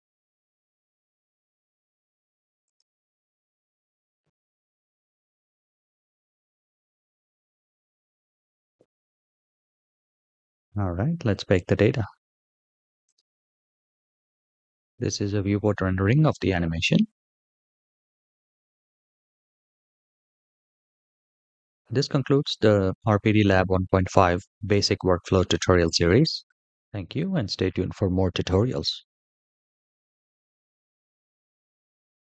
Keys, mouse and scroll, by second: 2.7-3.1 drag, 4.5-9.0 scroll down 9, 9.7 click, 12.8-32.2 drag.